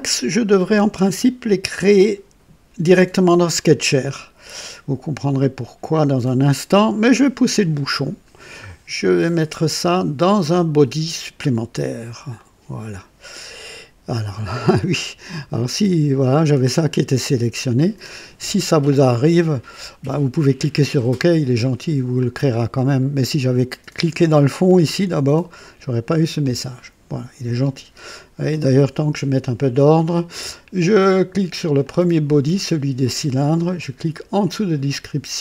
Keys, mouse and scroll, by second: 8.5-9.7 drag, 12.3 click, 20.9 click, 22.2 scroll down 2, 31.7 click, 35.2 click.